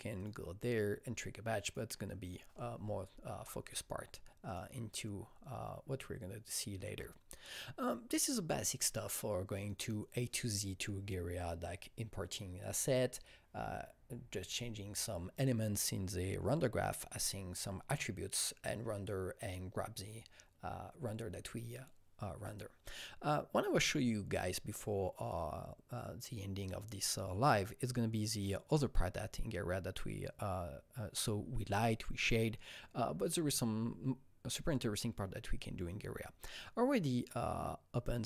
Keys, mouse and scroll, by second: 0.1 click, 1.6 click, 2.2 click, 4.4 click, 9.6 click, 36.4 click.